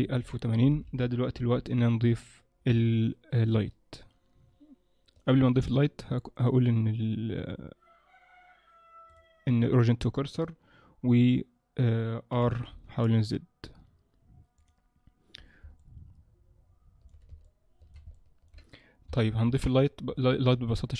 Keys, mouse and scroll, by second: 0.9 KP_0, 2.9 ctrl+middle click, 6.5 click, 12.3 r, 15.8 middle click, 17.5 shift+middle click, 18.1 ctrl+middle click, 19.1 KP_0, 19.5 KP_1, 19.8-20.3 scroll down 7, 20.6 ctrl+s.